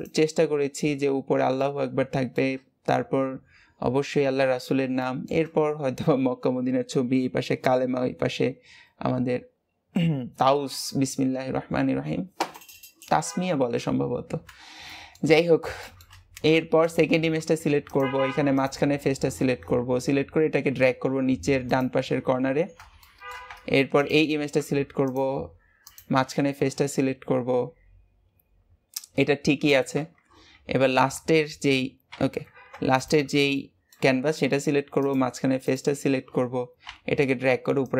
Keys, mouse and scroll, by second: 1.2 scroll down 1, 1.5-3.0 shift+middle drag, 3.0-3.8 scroll down 2, 3.8 scroll down 2, 4.9-8.1 shift+middle drag, 14.8 shift+middle click, 15.2-15.7 scroll up 4, 15.7 shift+middle click, 16.1 scroll up 1, 16.5 Tab, 16.7 click, 17.3 Tab, 17.8 click, 18.5 click, 20.6 g, 22.5 scroll down 3, 22.9 shift+middle click, 23.4 Tab, 23.9 click, 24.5 Tab, 24.9 click, 25.7 click, 29.9 Escape, 32.5 Tab, 32.9 click, 33.5 shift+middle click, 34.0-34.4 scroll up 2, 34.4 Tab, 34.9 click, 35.5 click, 36.7 g.